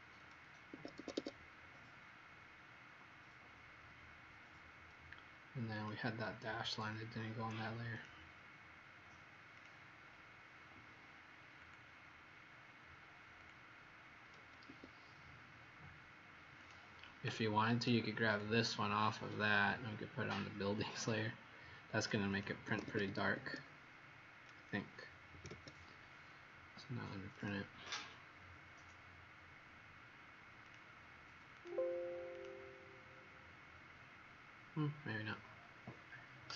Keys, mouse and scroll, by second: 0.6 Escape, 0.9 Escape, 1.1 Escape, 1.5 scroll down 1, 3.8 middle click, 5.7 click, 14.6 Escape, 16.5 click, 22.6 Escape, 22.8 Escape, 23.5 Escape, 25.3 ctrl+p, 27.3 click, 27.4 click, 30.6 click, 31.5 click, 32.3 click.